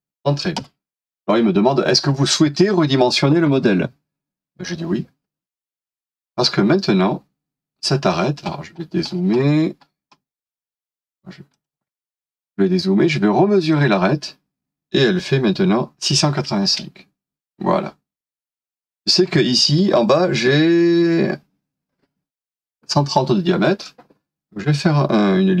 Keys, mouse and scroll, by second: 0.7 Return, 8.2 scroll down 1, 16.7 space, 24.7-25.3 scroll up 1.